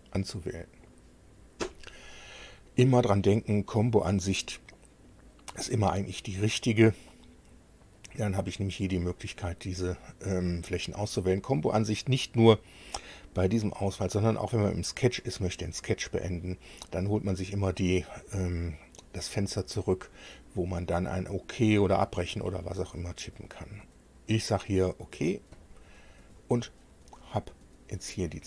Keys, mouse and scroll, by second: 5.1 click, 8.0 click, 25.5 click, 27.4-27.7 scroll up 1, 27.9 scroll up 1.